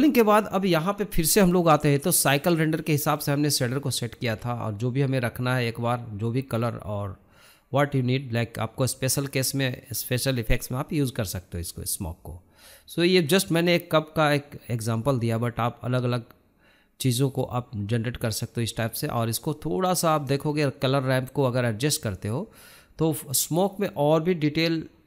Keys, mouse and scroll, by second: 3.4-5.3 scroll up 1, 5.3-5.9 scroll down 6, 5.9-7.5 shift+middle drag, 7.5-7.8 scroll up 3, 7.8-25.0 shift+middle drag.